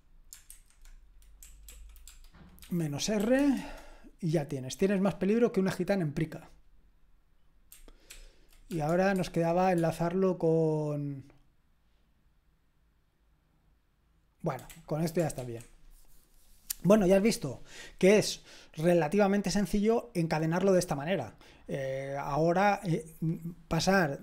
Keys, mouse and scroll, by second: 0.5 alt+b, 1.4 Right, 1.7 Right, 1.8 Right, 2.0 space, 2.6 -, 3.2 r, 3.3 space, 3.5 Return, 8.1 ctrl+p, 8.7 space, 9.1 shift+\, 9.7 space, 14.7 BackSpace, 15.3 ctrl+c.